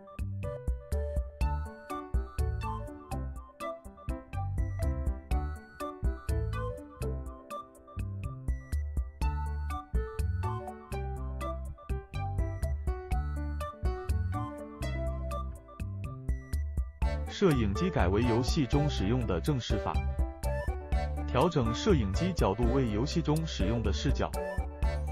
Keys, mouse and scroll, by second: 0.0 click, 0.6 middle click, 0.8 scroll up 1, 0.9 click, 1.8 middle click, 1.9 click, 2.1 click, 2.5 click, 3.0 middle click, 3.2 click, 3.4 click, 3.5-3.9 scroll down 2, 3.6 middle click, 4.0 click, 4.6 shift+a, 4.8 s, 4.9 middle click, 5.2 click, 5.3 middle click, 5.5 click, 5.7 click, 6.0 click, 6.4 ctrl+l, 6.5 middle click, 6.8 click, 7.5 click, 7.9 middle click, 8.2 ctrl+l, 8.5 click, 9.1 click, 9.2-10.5 click, 10.8 middle click, 11.1 ctrl+l, 11.5 click, 11.7 click, 12.3 click, 12.3 middle click, 12.5 click, 12.8 middle click, 12.9 Tab, 13.0 click, 13.0 scroll up 2, 13.1 middle click, 13.2 shift+middle click, 13.4 click, 13.5 Tab, 14.1 click, 14.3 click, 14.4 shift+click, 14.5 shift+click, 14.8 scroll down 1, 14.9 Tab, 15.0 click, 15.0 middle click, 15.7 middle click, 16.0 click, 16.5 click, 20.3 click, 22.1 click, 23.6-25.1 click.